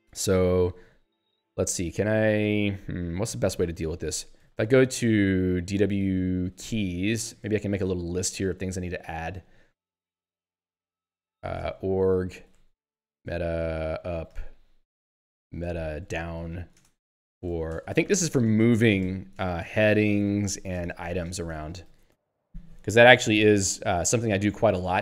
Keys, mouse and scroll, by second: 0.5 Down, 1.3 Up, 4.7 ctrl+f, 5.5-7.3 typing, 7.3 Return, 8.1 Page_Down, 8.9 Down, 10.4 Return, 10.8 Up, 11.3-22.2 typing, 24.6-25.0 typing.